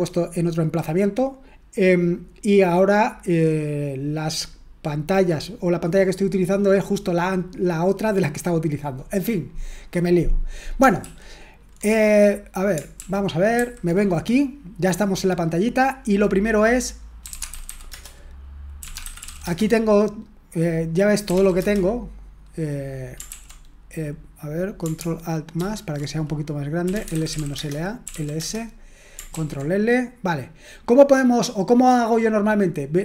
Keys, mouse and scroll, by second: 10.9 super+l, 12.9 super+l, 13.5 super+h, 16.9-21.8 typing, 23.2 ctrl+l, 25.5 ctrl+alt++, 26.6-28.5 typing, 29.3 ctrl+l.